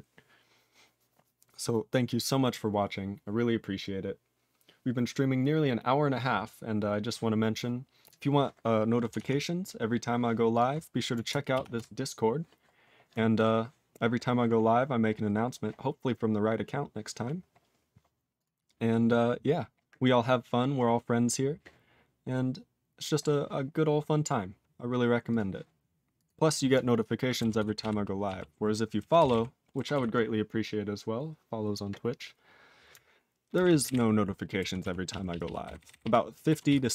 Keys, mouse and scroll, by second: 7.9 click, 8.0 click, 25.3 click, 26.1 click, 26.2 click, 26.4 click, 26.5 click, 27.5 ctrl+s, 27.7 ctrl+p, 28.2 ctrl+p, 29.1 ctrl+space, 29.2 ctrl+e, 29.2 ctrl+g, 29.9 ctrl+s, 33.5 ctrl+space, 33.6 ctrl+a, 33.8 ctrl+g, 33.8 ctrl+e, 34.8 ctrl+s, 35.0 ctrl+p, 35.2 ctrl+p, 35.4 ctrl+p, 35.6 ctrl+n, 35.7 ctrl+n, 35.9 ctrl+n, 36.0 ctrl+e, 36.6 ctrl+s.